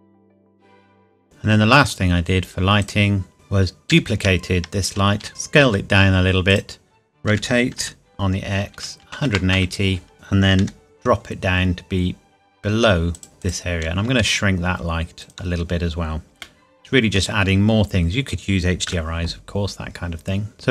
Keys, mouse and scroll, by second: 0.0 click, 0.4 click, 0.6 ctrl+v, 0.8 KP_Enter, 1.2 click, 1.2 scroll down 1, 2.8 click, 3.9 shift+d, 5.2 Escape, 5.6 s, 6.5 click, 7.3 r, 7.8 x, 9.0 KP_1, 9.6 KP_Enter, 10.1 KP_5, 10.6 g, 13.2 click, 14.2 s, 15.2 click, 16.4 middle click, 17.5 scroll up 1, 18.9 KP_0, 20.5 click.